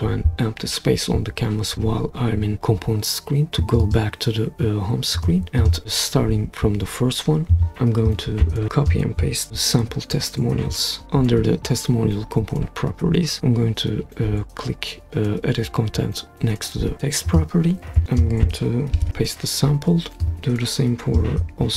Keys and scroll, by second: 9.5 super+c, 19.0 super+v, 21.5 super+c.